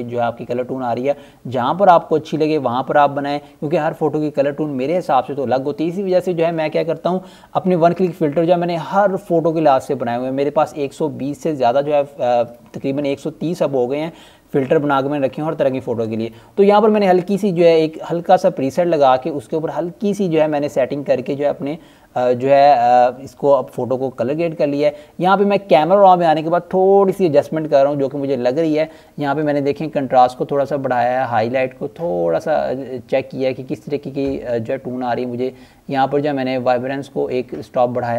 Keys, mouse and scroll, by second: 5.1-9.5 scroll up 1, 15.4 click, 20.2 click, 36.1 click.